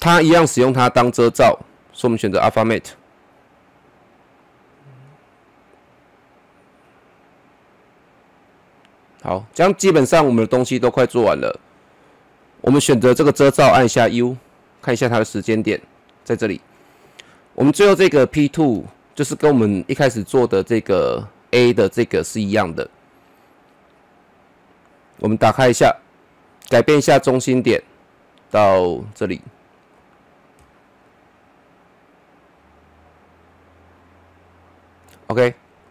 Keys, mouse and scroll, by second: 14.1 u, 15.4 typing, 17.7-20.4 drag, 20.4-22.2 scroll down 1, 25.8-30.2 drag, 30.2-30.6 scroll up 1, 30.6 middle click, 31.3-32.4 scroll up 1, 32.4-35.5 drag, 35.5-35.9 scroll down 1.